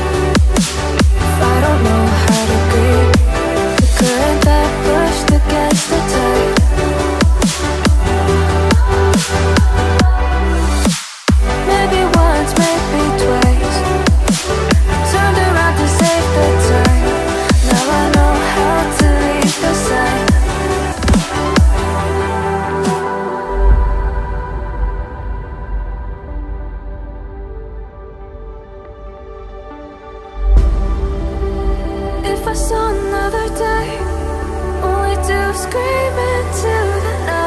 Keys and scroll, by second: 0.5 ctrl+z, 14.1 ctrl+z, 14.5 ctrl+z.